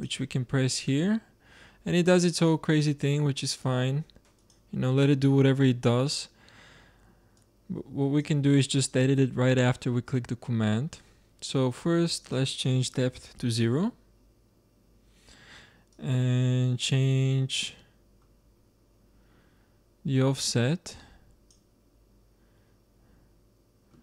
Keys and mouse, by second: 7.3-9.2 drag, 12.1-14.0 drag, 15.8-17.7 drag, 17.7-22.7 middle drag.